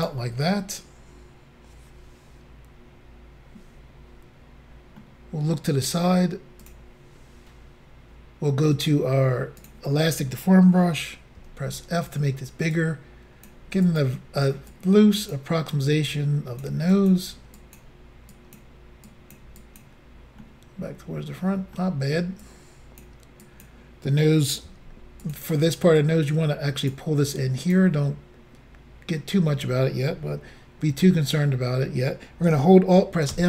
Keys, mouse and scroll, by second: 5.0 middle click, 6.6 click, 7.3-8.0 scroll up 2, 9.6 click, 11.4 f, 12.1 click, 12.8 click, 13.9 click, 14.0 click, 14.7 click, 15.9 click, 17.0 click, 17.1 click, 17.6 click, 18.4 click, 19.1 click, 19.6 click, 20.4 middle click, 22.5 click, 23.4 click, 24.7 f, 25.2 click, 26.0 click, 27.3 click, 33.3 alt+m.